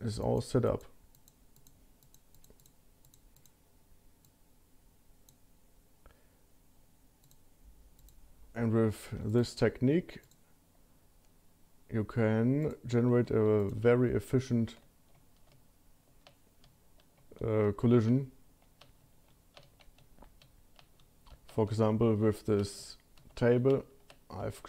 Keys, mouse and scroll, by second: 9.1 Tab, 9.3 click, 10.2 click, 12.7 click, 13.3 q, 18.4 shift+middle click, 20.8 shift+middle click, 22.2 shift+middle click.